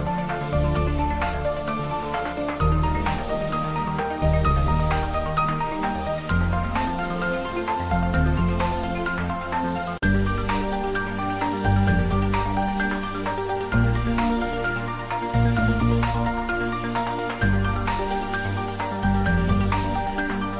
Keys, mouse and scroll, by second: 0.4 click, 1.0 r, 2.3 click, 2.8 g, 3.4 click, 3.6 ctrl+z, 5.1 click, 5.2 Tab, 6.1 ctrl+3, 6.5 Tab, 7.6 ctrl+middle click, 8.2 g, 8.7 x, 9.9 click, 10.6 g, 11.9 click, 12.2 ctrl+s, 12.6 middle click, 13.5 ctrl+middle click, 15.0 Tab, 16.4 a, 17.6 alt+e, 17.6 click, 17.6 click, 19.6 click, 19.7 Tab, 20.0-20.5 middle drag.